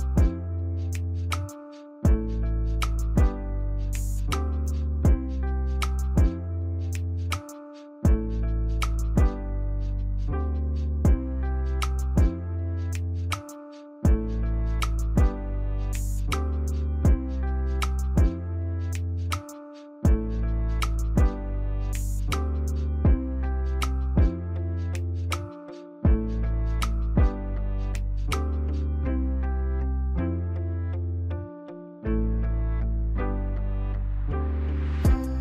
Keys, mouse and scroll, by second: 2.1 ctrl+z, 20.1 right click.